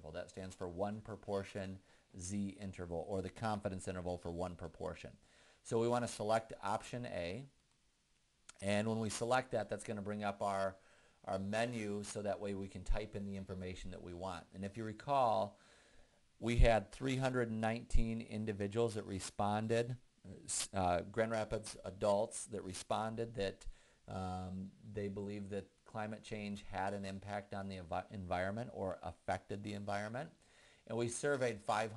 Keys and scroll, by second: 8.0 Return.